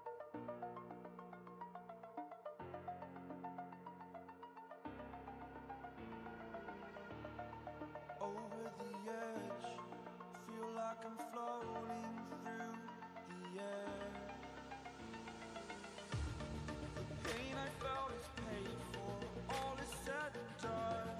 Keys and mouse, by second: 2.1 right click, 3.4-9.4 drag, 5.8 Down, 10.3 v, 11.7 x, 13.6 x, 13.9 x, 14.9-17.9 drag, 18.2 ctrl+space, 18.4 ctrl+click, 18.7-19.4 ctrl+space.